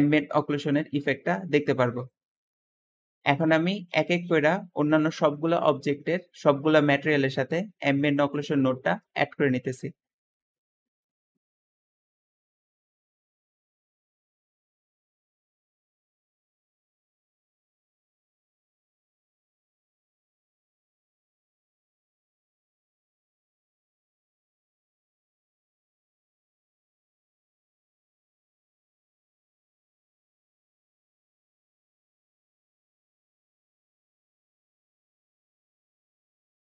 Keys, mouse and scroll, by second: 12.2-12.8 typing, 12.8 Return, 13.6 click, 13.9 click, 14.6 ctrl+c, 15.3 ctrl+v, 15.9 click, 16.1 click, 16.4 ctrl+c, 17.6 scroll down 2, 17.8 ctrl+v, 18.2 g, 21.5 ctrl+v, 21.5 ctrl+v, 21.8 middle click, 22.7 click, 23.2 ctrl+v, 23.3 ctrl+v, 24.2 click, 25.1 shift+middle click, 25.4 ctrl+v, 25.7 click, 26.4 ctrl+click, 27.0 click, 29.2 shift+middle click, 29.2 scroll down 2, 29.6 middle click, 29.8 click, 31.3 ctrl+v, 32.6 click, 33.2 click, 34.1 ctrl+v, 34.1 ctrl+v, 35.0 click, 36.4 ctrl+v, 36.5 ctrl+v.